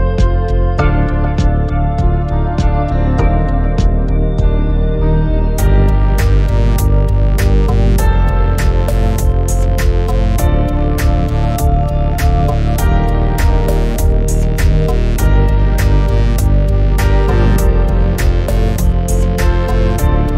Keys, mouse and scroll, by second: 8.2-14.7 drag, 15.0-15.4 scroll down 4, 15.4 scroll up 2, 18.5 shift+middle click, 19.0-19.8 scroll up 1.